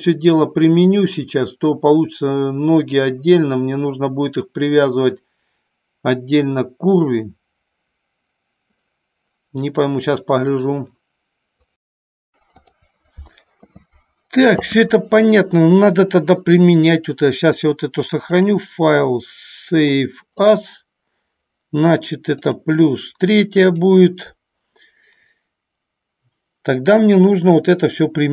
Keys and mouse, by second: 18.4-21.1 drag, 27.1 click.